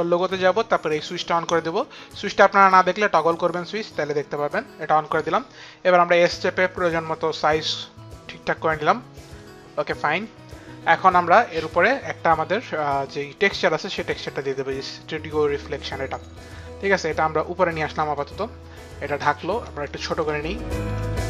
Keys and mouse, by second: 7.9 click, 7.9 s, 14.4 click, 16.6 click, 21.0 click.